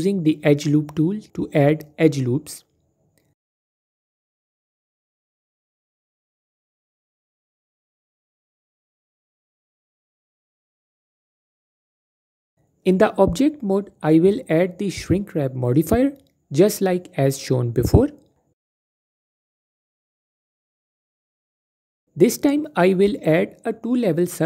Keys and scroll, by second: 2.8 typing, 6.5-7.6 typing, 9.1-10.6 typing, 10.2 ctrl+z, 10.9 ctrl+z, 11.7 typing, 20.4 F4, 21.8 F4.